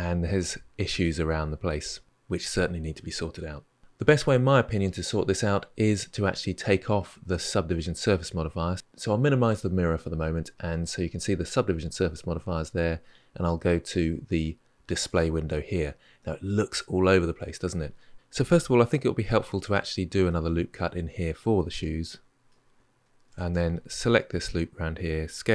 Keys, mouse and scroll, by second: 0.8-2.6 middle drag, 8.7-10.8 scroll up 3, 10.8 click, 14.8 click, 16.0-19.0 middle drag, 19.0 ctrl+r, 20.0-22.7 middle drag, 23.1 alt+click, 25.2 s.